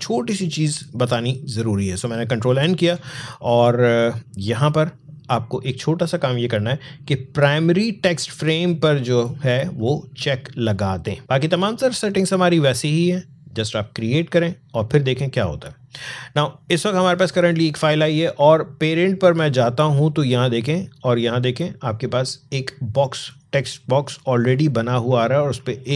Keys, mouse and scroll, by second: 2.4 ctrl+n, 4.4 click, 14.5 click, 18.7 click, 23.3 click, 25.6 alt+scroll up 1.